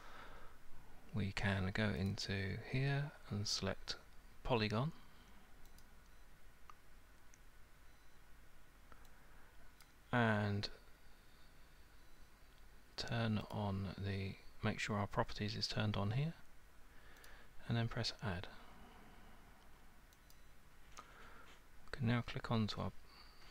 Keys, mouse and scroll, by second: 0.0-0.5 alt+scroll, 2.1 click, 5.8 click, 9.8 click, 13.5 click, 17.3 click, 20.3 click.